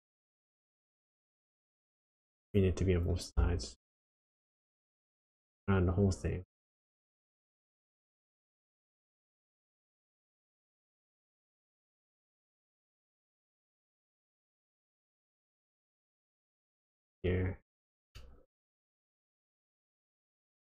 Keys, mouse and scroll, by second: 5.7 click, 9.9 click, 12.6 middle click, 13.5-14.2 scroll up 2, 14.2 click, 17.6-18.1 scroll down 2, 18.1 middle click, 18.9 scroll up 1, 19.1-19.7 scroll down 4, 19.8 middle click.